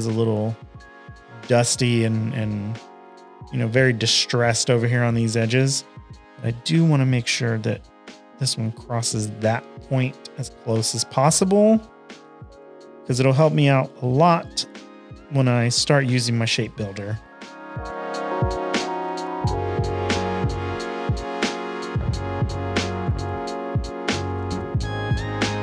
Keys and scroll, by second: 5.6 a, 9.5 shift+super+a, 9.7-11.6 typing, 16.0 shift+super+a, 16.2-18.2 typing, 16.4 super+-, 16.5 super+-, 16.6 super+-, 21.4 shift+super+a, 21.5 v, 21.8 space, 22.0 space, 22.3 p.